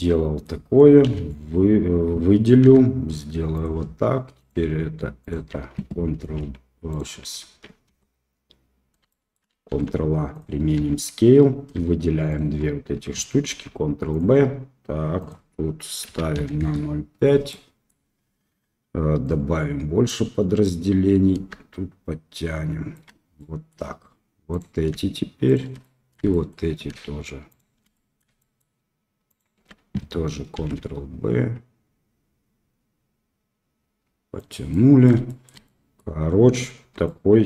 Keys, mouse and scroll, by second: 1.0 a, 2.6 e, 4.3 click, 5.2 alt+click, 6.1 ctrl+b, 7.8 Tab, 9.0-9.3 shift+middle drag, 9.6 ctrl+a, 10.7 Tab, 12.3 shift+click, 13.5 ctrl+b, 16.6 click, 17.5 middle click, 19.3 click, 20.8-23.0 drag, 23.3 middle click, 24.5 click, 25.4 shift+click, 25.8 middle click, 26.3 shift+middle click, 27.5 shift+click, 27.9 middle click, 28.3 shift+middle click, 29.2 shift+click, 30.5 ctrl+b, 34.7 middle click, 35.2 shift+middle click, 35.6 middle click, 36.8 Tab, 37.0-37.4 middle drag.